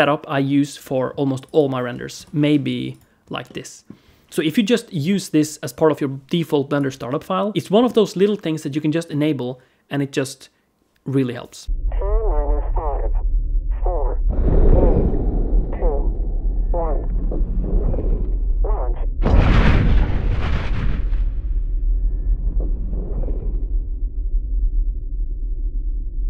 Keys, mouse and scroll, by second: 1.2 click, 3.0 scroll up 1, 3.3 middle click, 6.5 click, 7.4 click, 7.5 alt+middle click, 7.5 click, 8.5 middle click, 11.6 middle click.